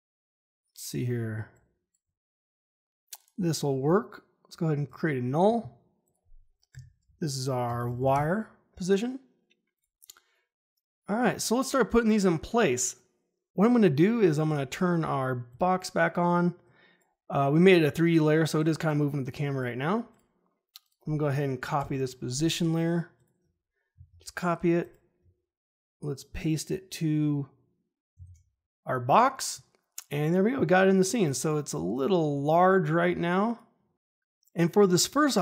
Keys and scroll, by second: 6.6 Return, 7.4-8.4 typing, 21.7 p, 23.9 ctrl+c, 28.1 ctrl+v.